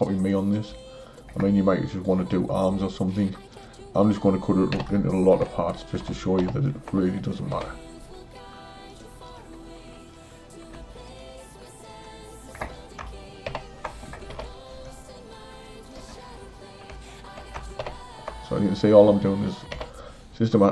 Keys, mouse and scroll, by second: 0.3 drag, 3.5 shift+click, 4.7 shift+j, 6.5 ctrl+j, 7.6 h, 8.9 click, 9.3 click, 11.0 shift+click, 11.9 shift+click, 13.5 ctrl+j, 14.3 h, 15.6 drag, 16.9 shift+click, 17.9 ctrl+j, 19.8 h.